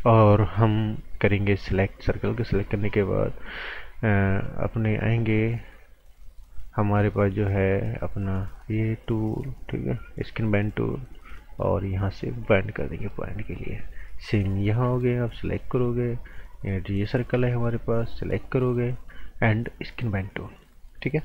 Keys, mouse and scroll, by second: 10.3 click, 12.7 right click, 14.6 b, 15.3 click, 15.6 right click, 18.6 click.